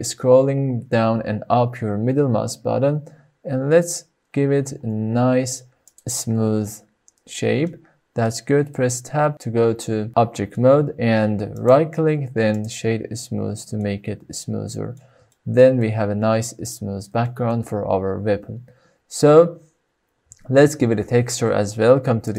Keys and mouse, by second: 8.3 middle click, 9.3 Tab, 10.5-11.0 middle drag, 12.0-13.8 right drag, 13.8-14.2 middle drag, 14.2 click, 14.2 right click, 14.9 middle click, 15.9 shift+middle click, 16.3-16.9 middle drag, 17.2 middle click, 17.8 shift+middle click.